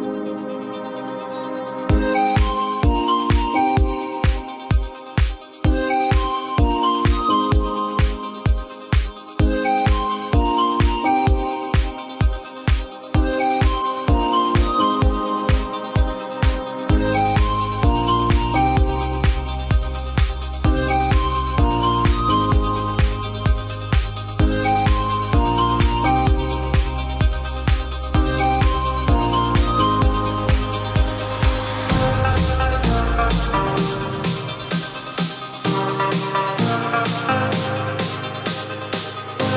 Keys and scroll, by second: 5.1 ctrl+t.